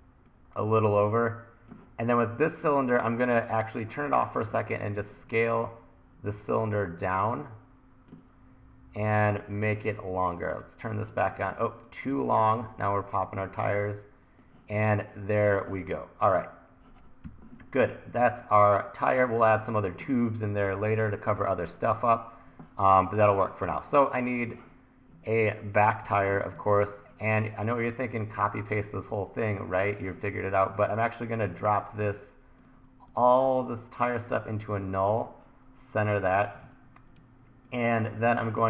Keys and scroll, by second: 4.6 1, 6.4 t, 11.5 1, 13.6 1, 14.8 1, 17.3 e, 26.1 super+s, 26.6 1, 36.7 super+s, 37.2 1.